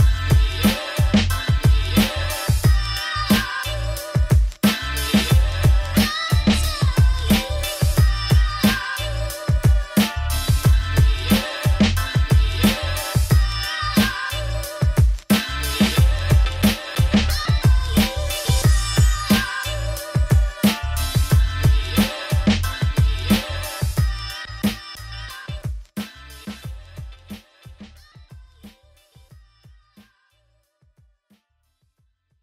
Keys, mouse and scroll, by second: 0.2 Tab, 0.4 middle click, 1.4 scroll down 1, 1.6 shift+middle click, 2.7 click, 5.1 shift+middle click, 5.9-6.2 scroll up 5, 6.2 click, 6.8 click, 6.9 Tab, 7.8 a, 9.7 g, 10.3 Tab, 10.5 click, 10.6 Tab, 11.0 Tab, 11.1 shift+click, 11.4 shift+click, 11.8 Tab, 11.9 a, 14.1 Tab, 14.3 click, 14.6 shift+click, 14.9 shift+click, 15.3 Tab, 15.6 a, 15.8 click, 16.2 a, 17.5 a, 17.8 r, 18.6 Tab, 21.2 middle click, 21.8 click, 23.2 click, 23.5 middle click, 24.7 click, 24.9 click, 25.5 middle click, 26.2 s, 28.0 click, 28.7 middle click, 29.0 s, 31.8 middle click, 32.0 scroll down 3.